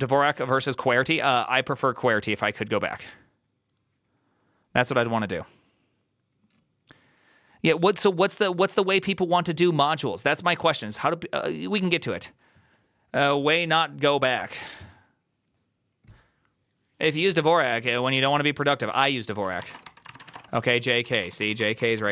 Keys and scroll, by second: 19.2-22.1 typing.